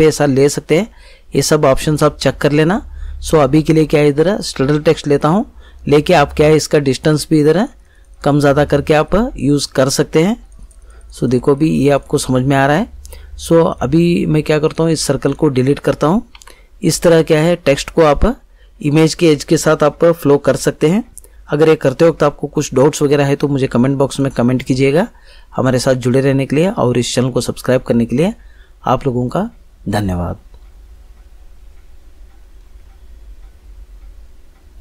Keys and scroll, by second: 16.3 Delete.